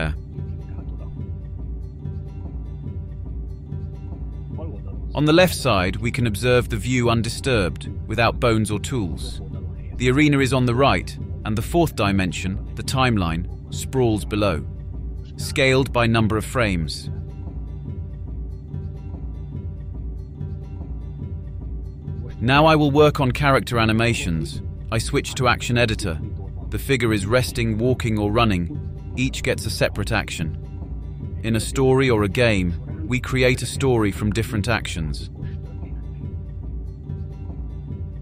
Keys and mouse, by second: 0.0 click, 3.8-4.5 drag, 9.8-10.6 shift+drag, 11.3-12.5 drag, 15.3-19.4 drag, 28.7 click, 29.6 click, 33.0-35.6 drag.